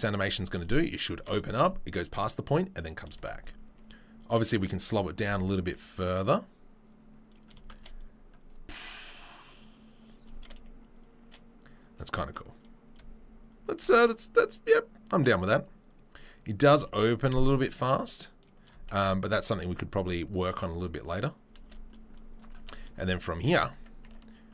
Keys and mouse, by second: 1.1 shift+space, 3.1 shift+space, 4.5-6.8 right drag, 5.2 g, 7.7 shift+space, 10.2-11.0 shift+drag, 10.2-11.0 shift+middle drag, 10.2-24.5 shift+right drag, 10.3 shift+space, 11.7 click, 11.7 middle click, 13.4 shift+click, 13.4 shift+middle click, 15.8 click, 15.8 middle click, 16.3 click, 16.3 middle click, 16.7 g, 18.4-22.4 drag, 18.4-21.4 middle drag, 18.9 shift+space, 21.6 shift+space, 22.6 Tab, 23.3 Tab, 23.5 click, 24.0 Tab.